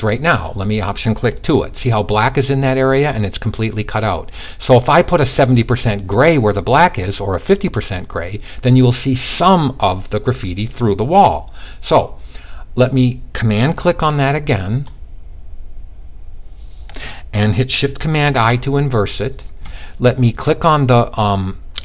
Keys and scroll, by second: 17.7 shift+super+|.